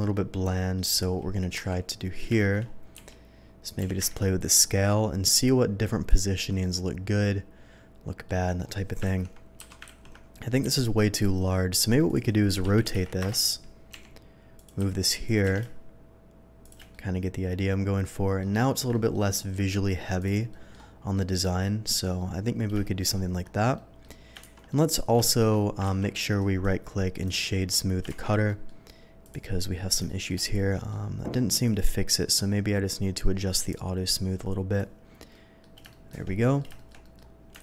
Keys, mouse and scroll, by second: 0.4-0.7 middle drag, 1.5 KP_7, 2.4 shift+middle drag, 2.9 s, 3.6 click, 3.9 y, 4.4 click, 4.6 scroll down 1, 4.9-5.3 middle drag, 6.0 click, 6.6-8.2 middle drag, 9.0 ctrl+z, 9.5 KP_7, 10.6 s, 12.0 click, 12.6-14.8 typing, 13.2 Return, 14.5 click, 15.2 click, 16.6 click, 16.9-18.4 middle drag, 18.6 shift+middle drag, 18.9 shift+middle drag, 19.4 shift+middle click, 20.2 shift+click, 20.5 shift+middle drag, 21.1-22.6 shift+middle drag, 22.8 shift+middle drag, 23.7 shift+middle drag, 24.4 2, 24.7 middle drag, 25.2 middle drag, 25.8 ctrl+z, 26.3 right click, 27.2 click, 28.1 shift+2, 28.4 middle drag, 29.2 click, 30.0 middle drag, 30.7 middle click, 31.6 click, 32.8 scroll up 1, 33.7-34.7 drag, 35.3 middle drag, 35.9 shift+middle click, 36.4 shift+middle click, 36.7 shift+middle drag, 37.0 shift+middle drag, 37.3 scroll down 1.